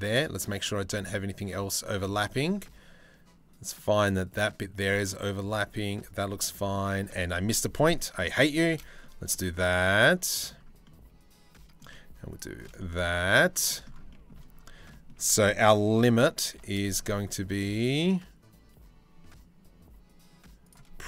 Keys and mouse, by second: 6.8 ctrl+z, 7.2 click, 8.1 alt+shift+click, 8.6-10.1 drag, 10.5 click, 13.2 shift+middle click, 14.5 shift+middle click, 16.0 ctrl+b.